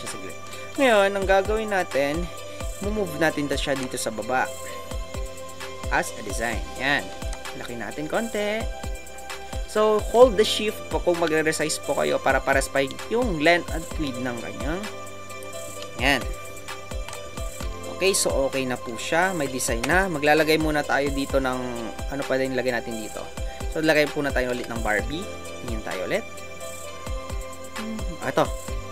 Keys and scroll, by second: 24.5 alt+Tab.